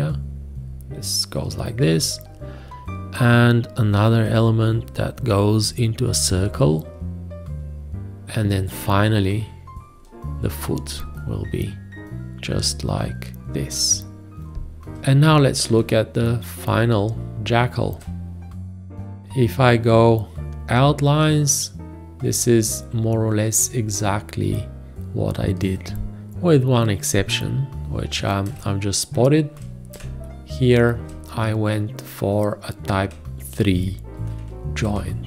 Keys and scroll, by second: 15.7 space, 28.5 space, 31.0 space, 33.6 ctrl+a, 34.9 space.